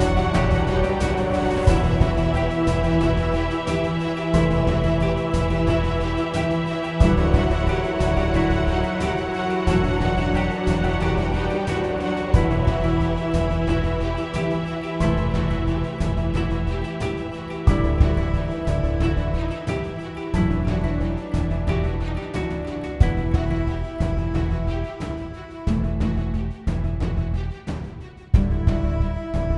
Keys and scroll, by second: 5.9-7.7 typing, 9.3-17.7 typing, 20.6-21.4 typing, 21.7 Return.